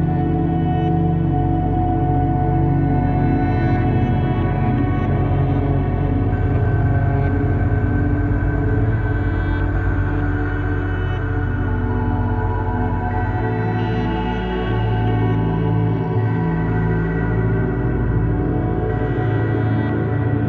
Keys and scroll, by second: 8.3 |, 10.2 v, 15.7 1, 16.3 1.